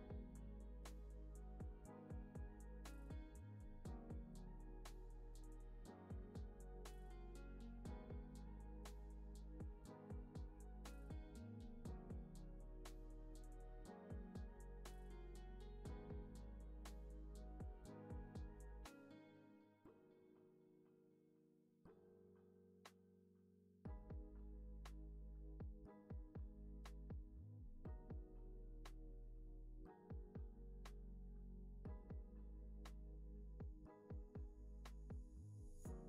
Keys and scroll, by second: 26.1 space, 29.3 v, 31.8 space, 33.2 Up.